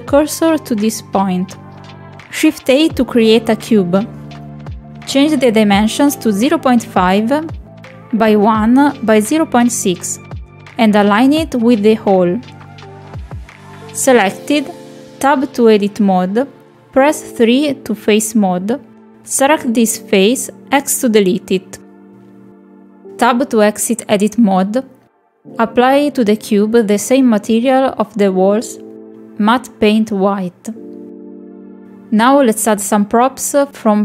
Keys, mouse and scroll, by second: 0.7 shift+a, 2.5 middle click, 3.7 click, 5.9 click, 6.9 click, 8.2 middle click, 8.6 middle click, 9.4 ctrl+click, 10.3 ctrl+click, 11.0 middle click, 11.5 ctrl+click, 11.8 middle click, 12.4 click, 13.1 ctrl+click, 13.4 middle click, 14.1-15.9 drag, 17.2-18.0 middle drag, 18.6 Tab, 19.8 3, 22.1 x, 24.9 middle click, 25.3 click, 27.5 click, 29.4-31.8 drag.